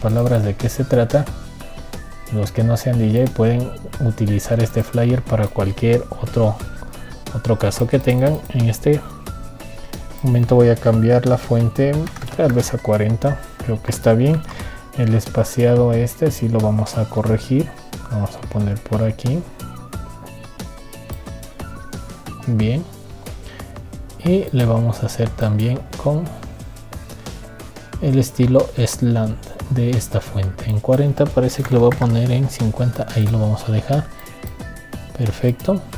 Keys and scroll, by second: 15.2 ctrl+t.